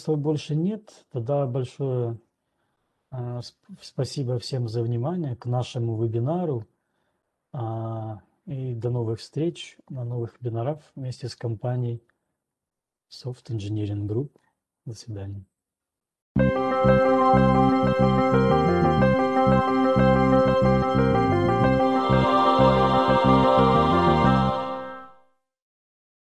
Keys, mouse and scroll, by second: 0.7-1.1 scroll, 1.7-2.2 scroll.